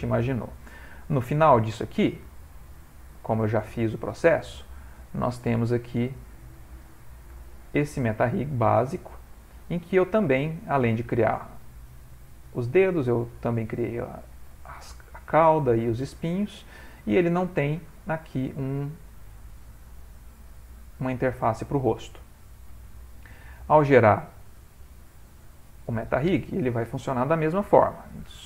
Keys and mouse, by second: 1.2 Tab, 3.6 x, 5.8 click, 7.6 middle click, 10.3 ctrl+middle click, 10.9 middle click, 12.3 middle click, 12.5 ctrl+middle click, 14.2 shift+middle click, 14.3 shift+middle click, 15.1 middle click, 15.8 middle click, 16.1 shift+middle click, 16.3 middle click, 16.4 middle click, 16.5 shift+middle click, 18.3 click, 18.8 shift+middle click, 19.5 middle click, 21.5 middle click, 21.7 shift+middle click, 22.4 ctrl+middle click, 22.5 ctrl+middle click, 22.8 middle click, 24.5 click.